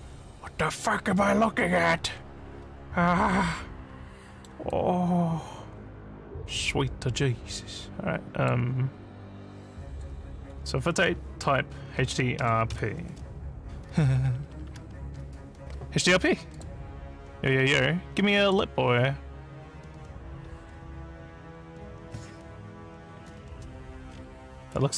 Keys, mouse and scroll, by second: 1.2 alt+middle click, 2.1 alt+scroll up 5, 3.5 alt+middle click, 4.7-8.5 alt+drag, 9.9 click, 12.1 d, 12.4 r, 16.5 click, 18.4 click, 20.4 scroll up 1, 20.4 scroll, 24.1 alt+scroll up 4, 24.7 alt+scroll up 1.